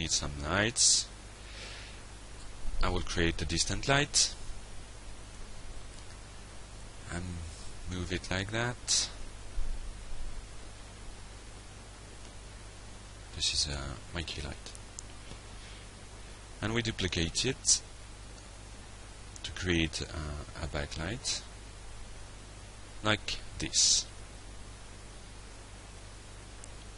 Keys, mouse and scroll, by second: 0.1 d, 0.3 s, 1.1 Down, 1.7 Return, 2.6 click, 3.3 ctrl+Tab, 4.4 click, 6.6-7.5 drag, 7.7-8.4 alt+drag, 8.9-10.3 drag, 10.5-11.4 alt+drag, 11.8 alt+Tab, 13.7 click, 14.3 ctrl+c, 15.0 ctrl+v, 15.8-16.2 alt+drag, 16.5 alt+drag, 17.4 alt+click, 18.4-21.4 drag, 21.7-23.3 alt+drag, 23.5 click, 23.8-24.3 alt+drag, 25.0 drag, 25.3-25.7 alt+drag, 25.8-26.4 alt+middle drag, 26.5 alt+click.